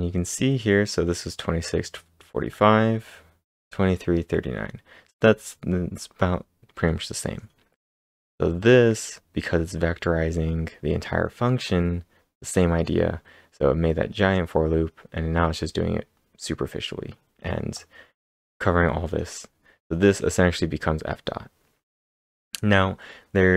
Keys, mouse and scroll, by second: 0.1-1.9 scroll up 2, 2.4 scroll down 1, 2.5 scroll down 1, 8.2 click, 8.2-10.3 scroll down 1, 10.3-11.0 typing.